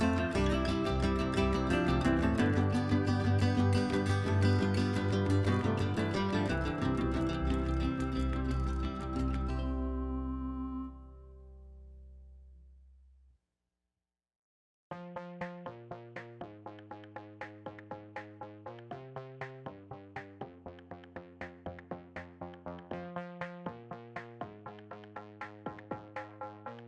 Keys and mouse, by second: 0.1 1, 0.2 1, 0.3 1, 0.4-0.8 1, 2.0 ctrl+z, 3.8 ctrl+z, 4.5 ctrl+shift+z, 5.5 ctrl+z, 5.7 ctrl+z, 7.2-8.1 l, 8.9 click, 10.2 click, 11.2 shift+click, 11.6 shift+click, 11.9 shift+click, 13.2 shift+click, 13.7 shift+click, 15.3 KP_Divide, 16.6 KP_Divide, 22.5 alt+click, 23.4 middle click, 26.0-26.8 right drag.